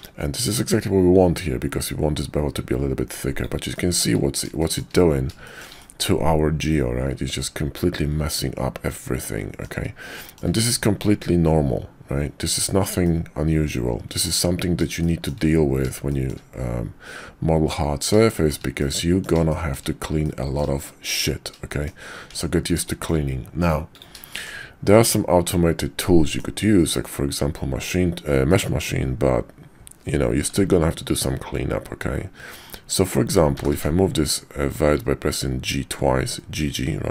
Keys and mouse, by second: 0.0-3.4 shift+drag, 3.7 shift+middle drag, 4.6 shift+drag, 4.8 shift+middle click, 5.3 shift+middle drag, 5.8-9.7 middle drag, 10.2 shift+middle drag, 13.0-14.2 middle drag, 15.0-15.3 shift+middle drag, 16.1 shift+middle drag, 18.3 shift+middle drag, 18.8-19.2 middle drag, 19.5 shift+middle drag, 20.2-20.6 middle drag, 20.8 shift+middle drag, 21.7 shift+middle drag, 22.3 Tab, 22.8 shift+click, 23.9 click, 24.3 shift+click, 24.9-26.4 drag, 26.6 middle click, 27.7 middle click, 28.5 click, 33.5 g.